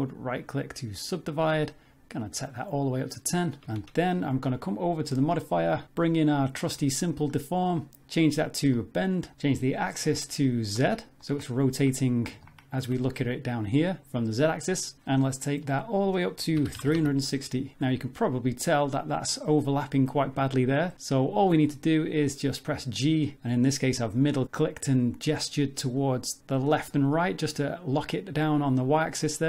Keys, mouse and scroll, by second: 2.2 click, 3.7 Tab, 3.9 middle click, 5.0 click, 8.7 click, 9.7 click, 11.2 middle click, 12.5 shift+middle click, 15.8 click, 17.8 z, 18.2 middle click, 20.2 Tab, 21.4 g.